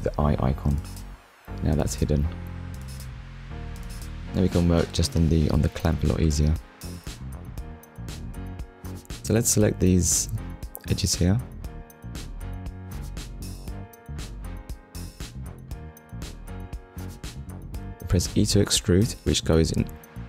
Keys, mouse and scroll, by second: 1.7 click, 2.5 middle click, 4.2 Tab, 7.8 click, 8.1 middle click, 9.0 click, 9.7 shift+click, 10.6 shift+click, 11.5 shift+click, 12.1 middle click, 13.4-13.8 scroll up 1.